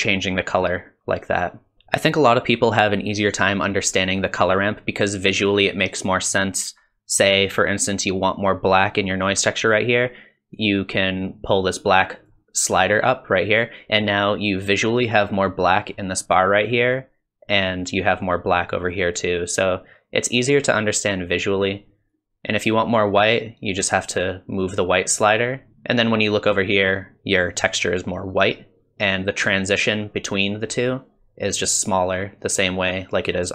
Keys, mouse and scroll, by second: 1.7 ctrl+shift+click, 1.7 BackSpace, 10.6 click, 22.1 click.